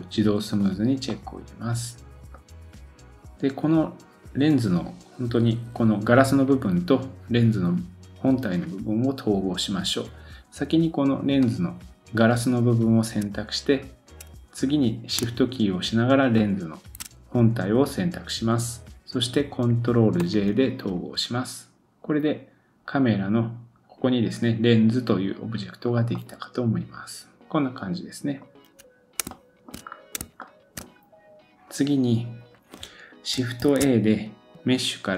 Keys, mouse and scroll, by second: 0.5 click, 1.1 middle click, 2.3-3.1 scroll up 1, 11.4 click, 16.4 shift+click, 20.2 ctrl+j, 25.8-27.4 scroll down 3, 26.1-28.9 middle drag, 29.8-30.2 scroll up 1, 30.4 shift+middle click, 33.6 shift+a.